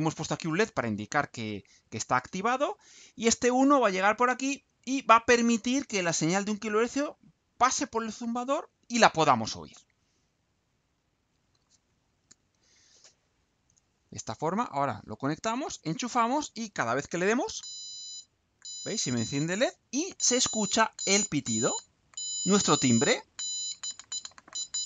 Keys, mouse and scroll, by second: 10.7 ctrl+u.